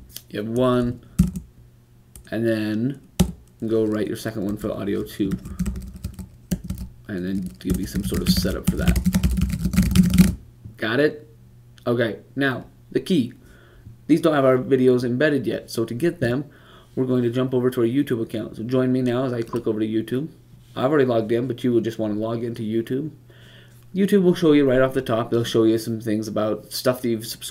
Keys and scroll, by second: 3.0 typing, 5.0-5.8 typing, 7.9-10.6 typing, 12.2 typing.